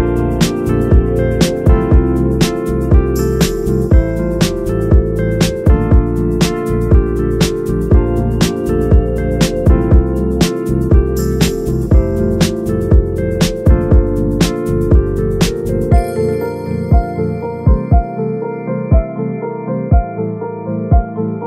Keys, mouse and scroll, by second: 5.1 click, 5.5-6.4 scroll down 1, 6.4 click, 7.4-12.1 drag, 12.5-13.7 alt+right drag, 15.1-16.9 alt+right drag, 16.9-18.8 drag, 18.8 BackSpace.